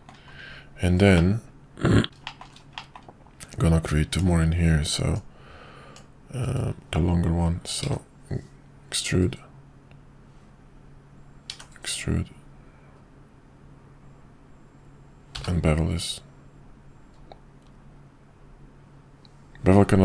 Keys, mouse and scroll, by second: 1.1-2.0 middle drag, 2.2 shift+middle drag, 2.7 middle click, 4.1 click, 5.3 click.